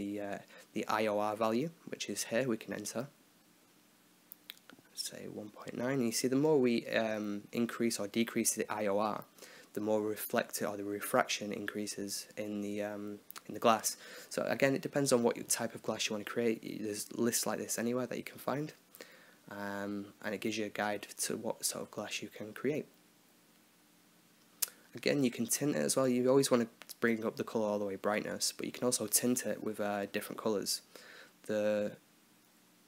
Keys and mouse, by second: 1.3 click, 2.6-3.6 drag, 3.5 BackSpace, 7.1-9.4 drag, 9.6 click, 12.3 click, 13.5-14.5 drag, 19.4-20.5 drag, 20.1 BackSpace, 22.7-25.1 drag, 27.3-28.4 drag, 32.5 middle click.